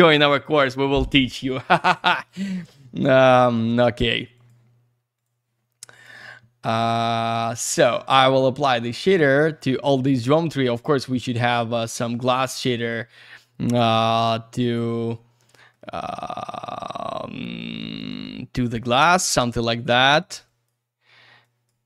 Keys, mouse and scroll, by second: 2.5 click, 2.8 ctrl+a, 4.3 click, 5.1 click, 5.9 click, 6.6 click, 7.1 middle click, 7.3 ctrl+a, 8.1 click, 8.9 click, 10.7 click, 12.3 click, 13.9 shift+click, 15.4 middle click, 16.6 click, 18.0 click, 18.9 click, 19.6 click, 20.4 click, 21.4 click.